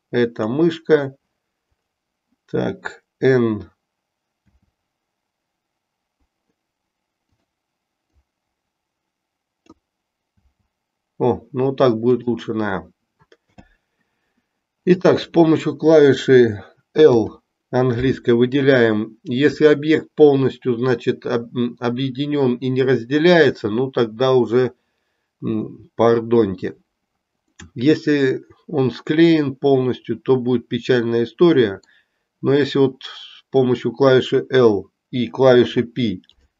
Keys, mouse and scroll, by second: 1.7 click, 4.3 b, 8.0-9.7 drag, 10.3 b, 13.4 n, 14.8 click, 17.0 l, 27.4-31.9 middle drag, 35.6 p.